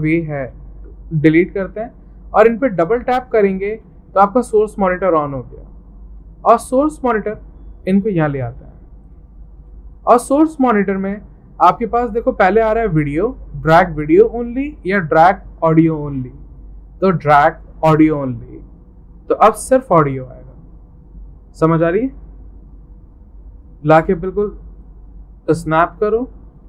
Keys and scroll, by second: 0.4 Delete.